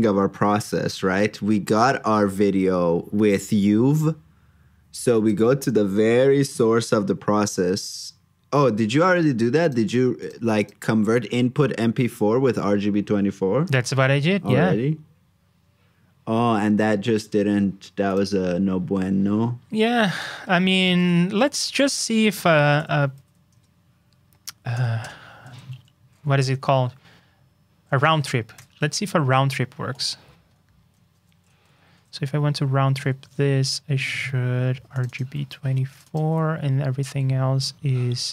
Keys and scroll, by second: 20.8 super+c, 21.3 super+k, 28.5 super+j, 31.7 alt+shift+Down, 35.3 super+c, 36.2 super+v.